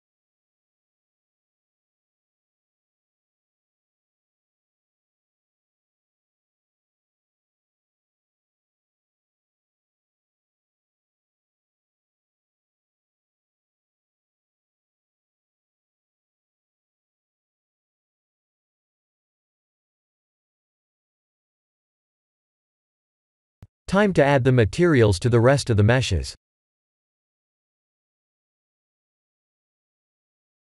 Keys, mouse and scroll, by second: 3.6 middle click, 4.0 middle click, 4.0 Tab, 4.3 middle click, 5.8-6.7 scroll down 4, 6.7 middle click, 6.7 scroll down 2, 8.0 middle click, 8.3 click, 9.0 click, 9.9 KP_7, 11.0-12.1 scroll up 6, 12.6 r, 15.1 ctrl+z, 15.6 r, 17.6 middle click, 18.2 middle click, 18.5-19.5 scroll down 8, 19.5 click, 20.1 middle click, 21.7 KP_1, 22.9 scroll up 1, 23.9 click, 25.5 click, 26.4 click, 27.5 click.